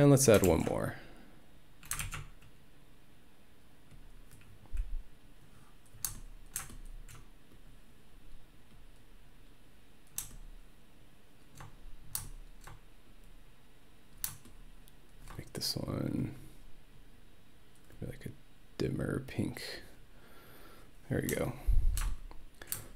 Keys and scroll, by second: 0.5 ctrl+d, 2.0 ctrl+r.